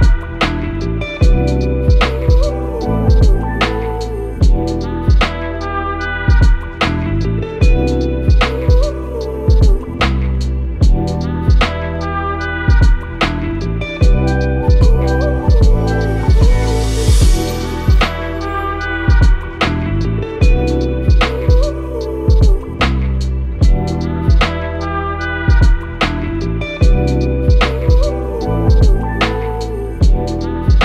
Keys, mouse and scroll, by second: 1.6-2.3 typing, 3.3-4.1 typing, 3.4 click, 3.6-6.2 drag, 8.2-11.0 drag, 9.1-10.0 typing, 21.4 right click, 22.0-23.7 drag, 28.4 click.